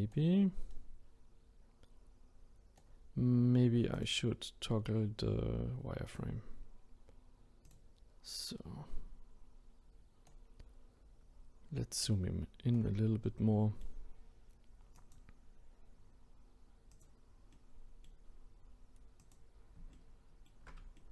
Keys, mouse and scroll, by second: 0.7-3.9 right drag, 3.9-7.0 drag, 8.5-10.6 right drag, 10.6 scroll up 1, 11.4 scroll down 1, 12.1-13.2 shift+right drag, 13.2-15.0 middle drag, 15.0 click, 16.9 click, 17.5-19.2 middle drag, 19.2 click, 19.9-21.1 ctrl+middle drag.